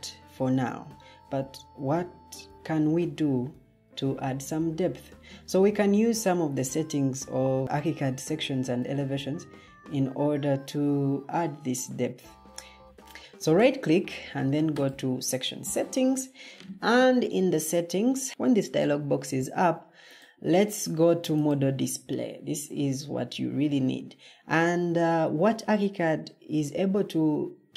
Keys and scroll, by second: 12.8 Escape.